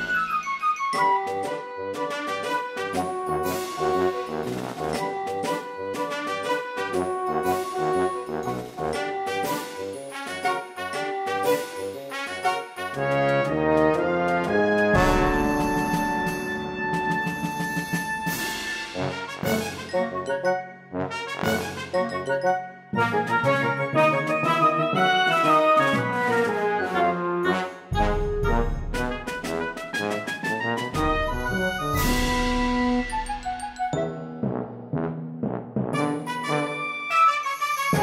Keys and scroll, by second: 8.2 ctrl+d, 9.1 e, 12.5 space, 15.9 p, 16.1 space, 25.1 g, 25.5 b, 26.5 ctrl+d, 26.6 e, 27.3 space, 27.8 ctrl+z, 28.3 p, 32.3 e, 32.5 ctrl+z, 33.5 space, 34.5 p, 34.7 space, 37.8 space.